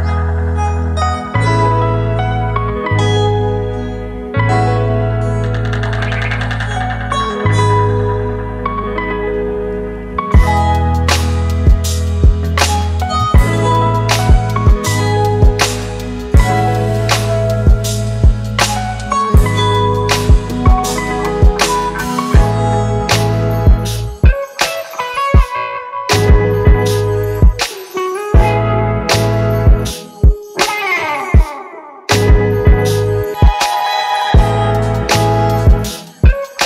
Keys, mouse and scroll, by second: 7.6 alt+scroll up 1, 8.7 alt+scroll up 1, 8.8 ctrl+=, 9.0 ctrl+=, 9.4 space, 11.1-11.8 typing, 15.0 typing, 22.1-22.8 typing, 33.0-33.3 typing, 35.6 double click, 36.2 typing.